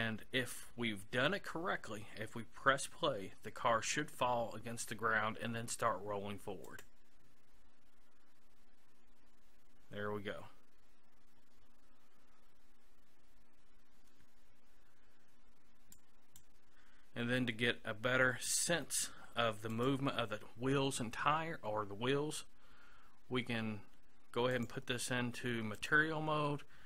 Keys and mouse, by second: 0.1-2.3 middle drag, 6.7-8.5 drag, 16.0-17.7 drag, 19.7-21.7 drag, 22.3-24.1 middle drag, 24.6-25.9 drag.